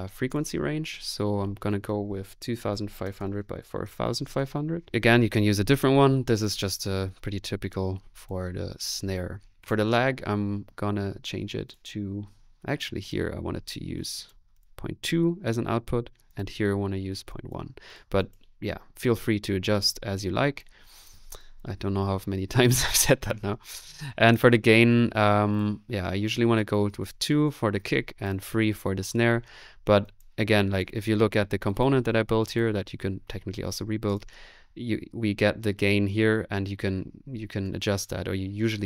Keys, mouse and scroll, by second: 31.8-32.5 typing.